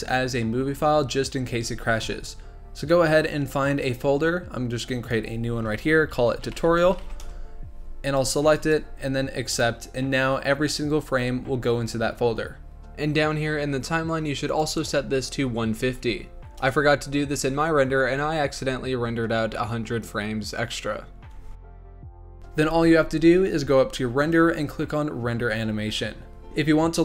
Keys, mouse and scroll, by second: 12.7 ctrl+z, 14.4-17.5 drag, 22.4 ctrl+s, 24.2-26.3 drag.